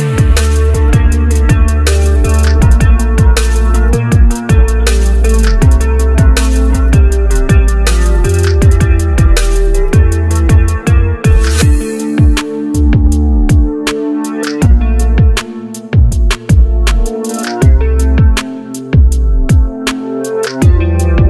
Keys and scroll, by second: 4.9 1, 18.9 1.